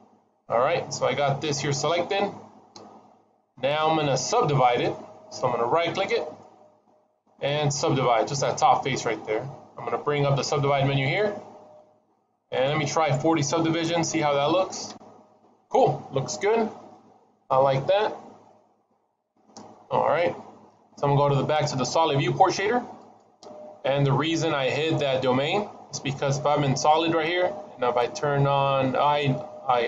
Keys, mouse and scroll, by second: 6.1 right click, 11.0 click, 12.4 click, 22.9 click.